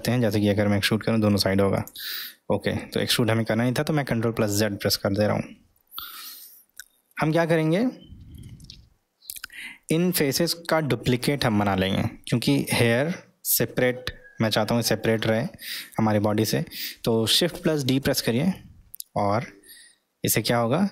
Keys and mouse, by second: 0.1 e, 5.8-6.4 ctrl+middle drag, 7.5-8.4 ctrl+middle drag, 9.6-12.7 middle drag.